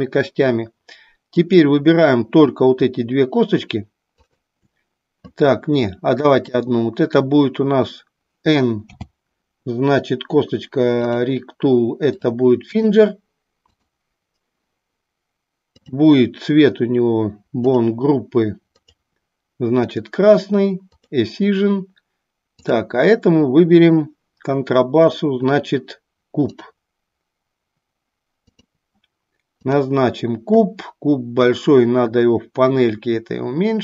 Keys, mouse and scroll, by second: 1.3 click, 4.1 click, 6.2 click, 8.9 n, 12.1 click, 13.8 click, 15.7 click, 17.7 drag, 18.8-20.1 drag, 21.1 click, 22.5-23.7 drag, 26.7-28.7 drag, 29.6 click, 31.4-33.8 drag.